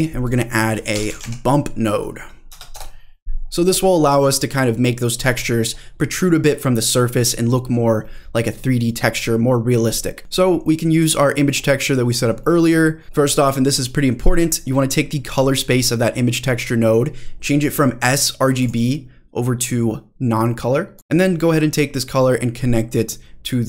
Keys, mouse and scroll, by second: 5.4-7.2 scroll up 4, 7.2-8.1 scroll up 2, 8.1 middle click, 8.7-9.0 scroll up 2, 9.0-9.9 scroll down 1, 9.9 middle click, 10.2 click, 10.2-10.7 scroll down 2, 10.7 middle click, 11.4 click, 12.5 middle click, 13.2-14.2 scroll up 2, 14.4 middle click, 14.8 scroll up 1, 15.5 middle click, 18.6-21.0 drag, 21.0 middle click, 21.0 scroll down 2, 22.0-23.6 drag.